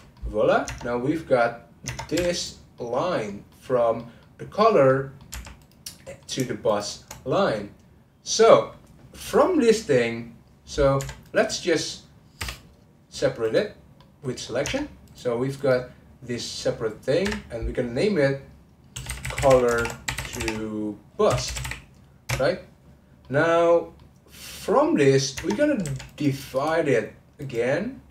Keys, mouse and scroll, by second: 0.1 middle click, 0.6 Tab, 1.8 Tab, 2.1 2, 2.3 click, 2.8-5.3 middle drag, 5.3 1, 5.6 click, 6.0 middle click, 6.6 shift+click, 7.3-10.4 middle drag, 11.2 click, 12.4 p, 14.0 middle click, 14.6 Tab, 15.0 click, 15.6 click, 17.2 F2, 23.2-25.4 middle drag, 25.4 Tab, 25.8 2, 26.1 click, 26.5-28.1 right drag.